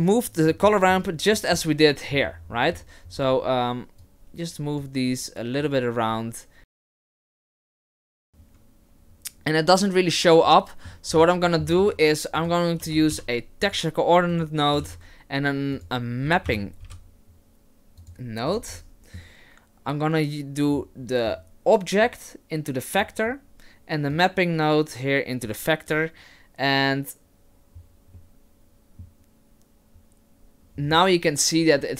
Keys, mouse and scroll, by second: 0.6 middle click, 1.4 middle click, 2.3 middle click, 2.7 scroll down 1, 3.2-3.6 scroll up 4, 4.1 click, 5.6 click, 6.6 click, 6.7 middle click, 6.9-7.3 scroll down 7, 7.0 shift+middle click, 7.3-7.7 scroll up 7, 7.4 shift+middle click, 8.2 click, 10.5 middle click, 11.1-11.7 scroll down 4, 11.4 middle click, 11.8 shift+a, 19.7 middle click, 21.0 middle click, 22.8 click, 24.2 click.